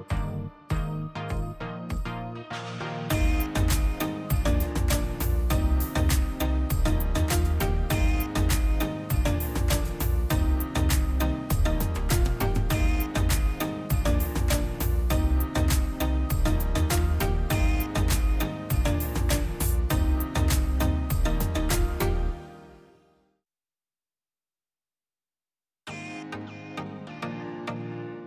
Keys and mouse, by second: 0.8-5.2 middle drag, 5.2-8.9 drag, 13.1 click, 14.0-14.8 drag, 14.8 Tab, 15.5-18.3 middle drag, 18.3 z, 18.6 r, 26.8-28.2 middle drag.